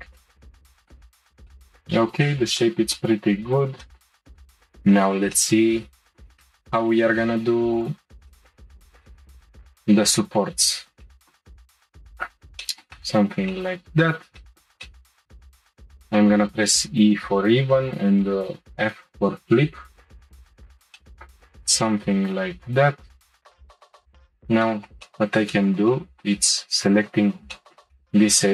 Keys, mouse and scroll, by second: 0.9-1.8 middle drag, 1.8-2.2 scroll down 1, 2.2-3.4 shift+middle drag, 3.4-3.8 scroll up 1, 3.8-5.8 shift+middle drag, 5.8-6.4 scroll up 1, 6.4-7.1 shift+middle drag, 7.1-7.7 scroll up 1, 7.7 click, 8.3-8.6 shift+middle drag, 8.9 middle click, 9.0 scroll down 1, 9.4 Tab, 10.4-11.1 scroll up 2, 11.1 middle click, 12.6-14.0 shift+middle drag, 14.0-14.4 scroll down 1, 14.4 shift+middle click, 20.9 shift+middle click, 21.4-21.8 scroll down 1, 21.8-24.0 shift+middle drag, 24.0 click, 24.6-26.8 shift+middle drag, 26.8 shift+click, 27.5 middle click, 28.4-28.5 scroll down 1.